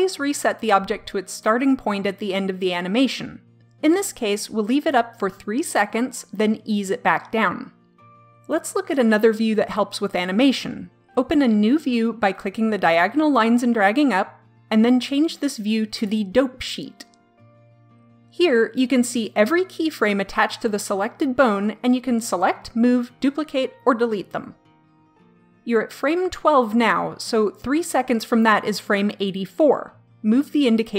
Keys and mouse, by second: 13.1-14.8 drag, 15.9-17.5 drag, 30.6 click.